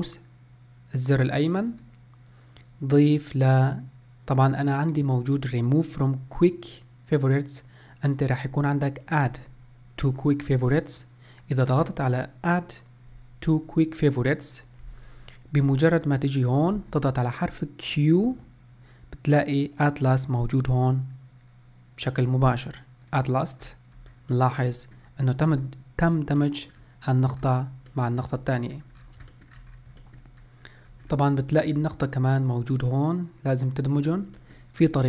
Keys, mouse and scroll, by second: 18.4 q, 23.7-24.1 scroll up 1, 24.1-24.4 scroll down 1, 24.4-25.6 middle drag, 25.6-26.5 scroll down 2, 26.5 scroll down 2, 26.5 middle click, 27.5 scroll down 1, 28.0-29.1 middle drag, 29.1-29.4 scroll down 4, 29.4 shift+middle click, 29.8-30.1 scroll up 1, 30.1 shift+middle click, 30.5-31.2 scroll down 1, 31.2-31.6 scroll up 1, 31.6-32.9 shift+middle drag, 32.9 click, 34.5 middle click, 34.9-35.0 scroll down 1.